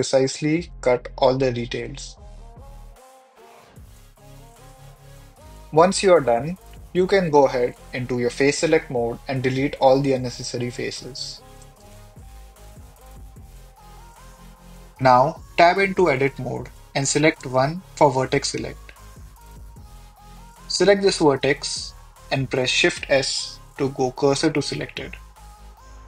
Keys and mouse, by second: 2.9 click, 3.5 click, 4.7 click, 5.7 click, 7.0-13.7 typing, 9.4 click, 9.9 click, 10.4 click, 11.4 click, 12.6 shift+middle click, 12.8 click, 13.0 click, 14.3 shift+click, 18.2 Tab, 20.1 1, 22.8 shift+s.